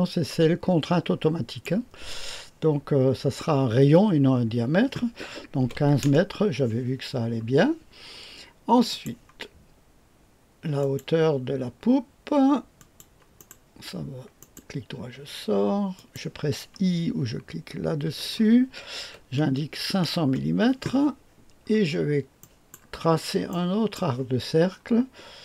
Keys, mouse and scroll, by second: 5.6 KP_1, 5.7 KP_5, 6.0 Return, 8.9 click, 10.8 click, 12.7 click, 14.4 right click, 15.9 click, 18.0 i, 19.0 KP_5, 19.4 KP_0, 19.7 KP_0, 20.2 Return, 21.4-22.4 scroll down 1, 22.4 right click, 22.4 typing, 22.9-23.5 scroll down 1, 23.5-24.0 right drag.